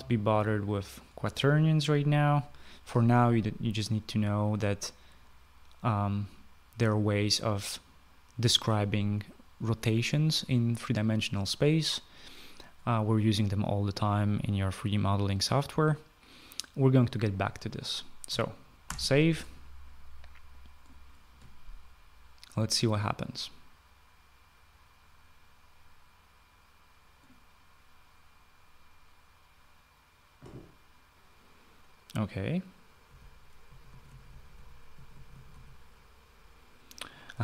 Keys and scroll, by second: 19.3 ctrl+s, 33.7-36.0 typing, 37.3 typing.